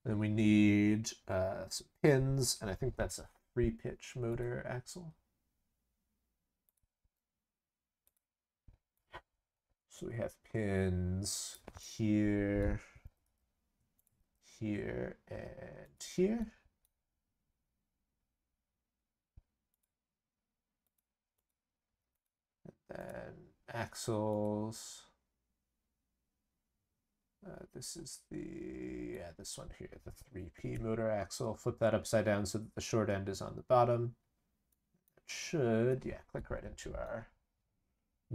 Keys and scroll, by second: 13.0 ctrl+c, 13.2 ctrl+v, 14.2 ctrl+v.